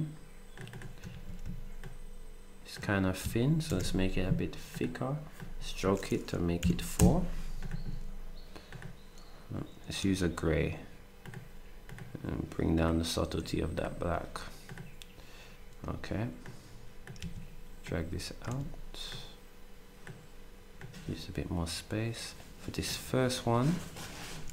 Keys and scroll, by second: 1.1 ctrl+s, 6.6 4, 6.9 Return, 17.2 ctrl+z, 18.5 z.